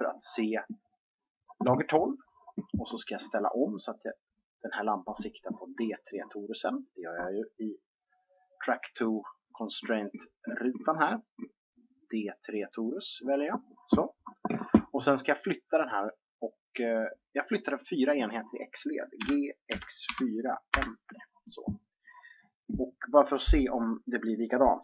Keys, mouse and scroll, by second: 6.8-10.2 drag, 10.2-19.0 middle drag, 19.1 g.